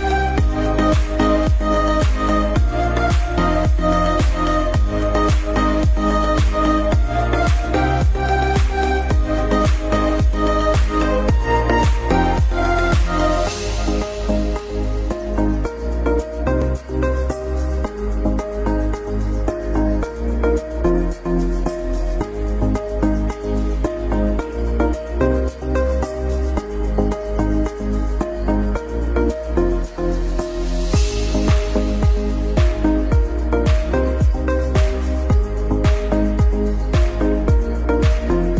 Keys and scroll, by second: 0.7 ctrl+Page_Down, 2.1 F3, 2.4 F2, 3.4 F4, 3.9 F2, 4.8 Escape, 5.4 F2, 10.1 shift+F2, 10.7 Escape, 11.0 F2, 13.6 shift+F2, 14.0 Escape, 17.9 ctrl+r, 21.8 Escape, 26.2 F2, 28.2 F4, 30.0 alt+c, 30.1 alt+w, 30.5 p, 33.0 shift+F2.